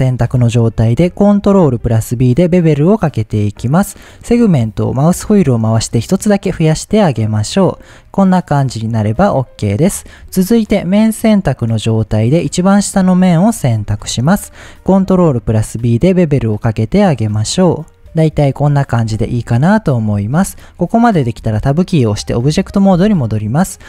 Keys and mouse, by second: 1.4 ctrl+b, 7.6 click, 9.6 middle click, 10.9 click, 11.5 middle click, 12.3 click, 13.1 middle click, 13.7 shift+middle click, 14.9 ctrl+b, 18.5-19.5 middle drag, 20.3 middle click, 21.6 Tab.